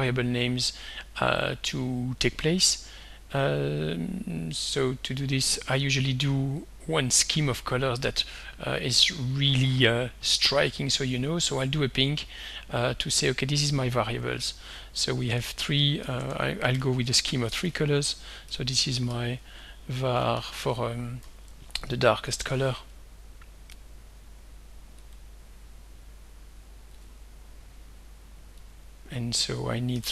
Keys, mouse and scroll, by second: 2.6 click, 6.6-8.5 drag, 9.5 click, 11.2 click, 12.3 click, 13.3 click, 13.7 click, 16.2-18.5 typing, 19.9-22.2 typing, 25.1-26.4 drag, 27.0 click, 28.7 click, 30.0-30.1 typing.